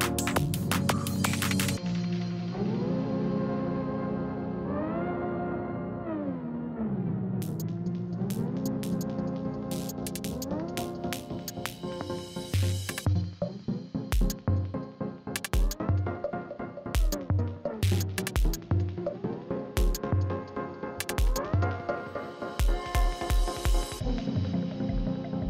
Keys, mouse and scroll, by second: 1.3 typing, 2.1 click, 6.1 click, 8.4 right click, 10.3 click, 14.0 scroll down 1, 18.7-19.2 scroll up 2, 21.7-23.2 drag, 23.2 right click, 23.7 click, 24.7 right click.